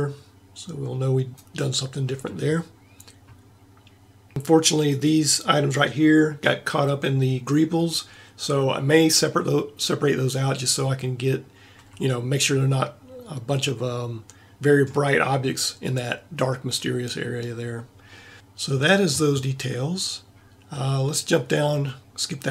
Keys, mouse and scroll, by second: 5.0-6.7 drag, 11.9 a, 13.9 middle click, 15.1-18.1 middle drag.